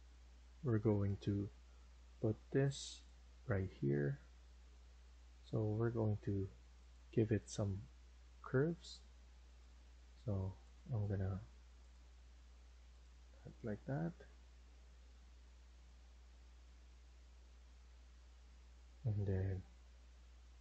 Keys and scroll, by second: 8.6 Escape.